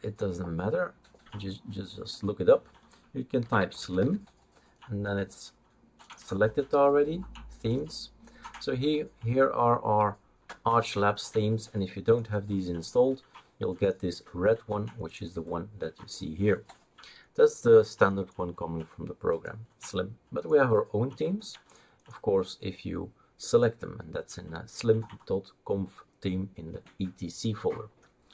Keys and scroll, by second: 3.2-4.5 typing.